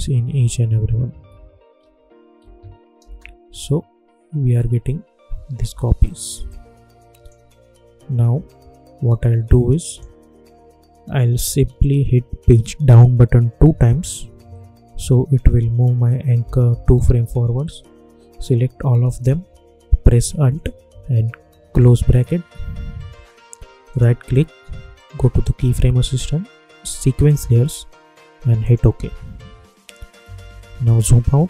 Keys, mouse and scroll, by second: 3.0 space, 5.6 space, 6.4-8.2 drag, 8.2 scroll down 1, 9.8 click, 11.0 scroll up 1, 13.5 Page_Down, 16.3-16.8 typing, 19.0 shift+click, 21.7 alt+], 23.8 right click, 27.3 click, 30.2-30.8 typing.